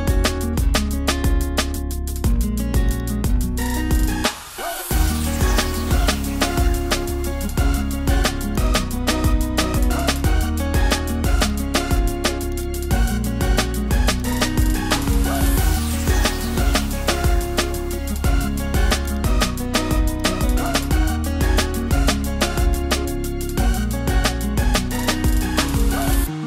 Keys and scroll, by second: 4.2 super+t, 4.2 super+e, 26.1 super+t.